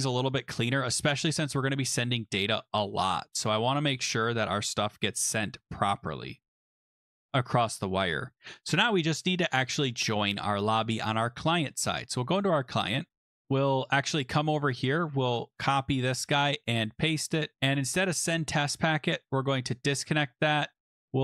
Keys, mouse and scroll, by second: 0.5 click, 1.0 Return, 1.5 Down, 1.7 Down, 3.4 Return, 5.3 click, 6.1 BackSpace, 6.6 i, 8.3 click, 10.6 click, 10.9 click, 12.1 click, 13.8 click, 14.7-15.0 scroll, 15.0 click, 16.0 ctrl+c, 16.1 ctrl+v, 17.6 click, 18.7 right click, 19.7 click, 20.2 right click, 21.0 click.